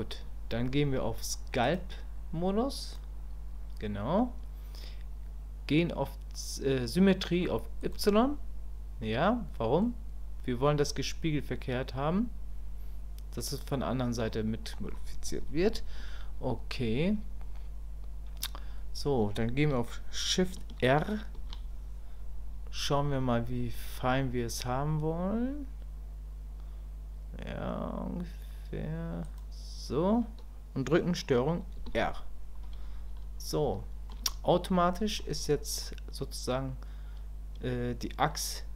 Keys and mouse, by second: 1.7-3.0 drag, 7.8 click, 9.3 middle click, 14.3 middle click, 15.6 KP_1, 33.8 shift+click, 34.3 click, 34.7 middle click, 35.8-38.3 middle drag, 38.6 middle click.